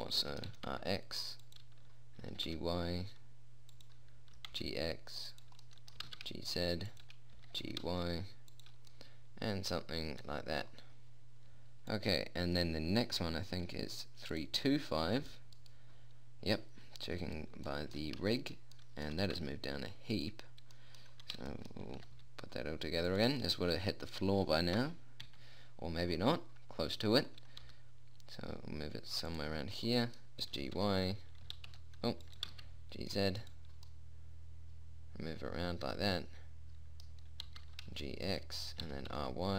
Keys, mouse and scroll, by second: 0.9 r, 2.7 g, 4.8 g, 6.5 g, 7.8 g, 8.1-9.4 middle drag, 12.4-14.7 drag, 14.8-16.8 drag, 15.6 right click, 16.8-19.2 right drag, 18.2-19.2 middle drag, 19.7 g, 22.4 r, 25.2 KP_1, 25.7 KP_3, 28.1 g, 28.9 middle click, 31.2 y, 31.9 g, 32.8 g, 37.9 g, 39.3 r.